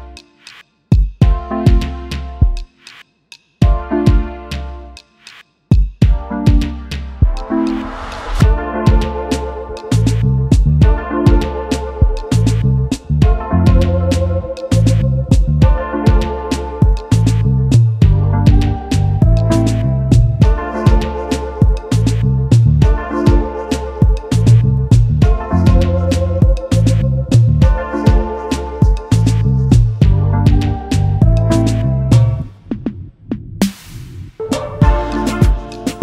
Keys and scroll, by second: 16.5-17.3 typing, 18.9 t, 22.6-23.9 typing, 29.6-30.7 typing.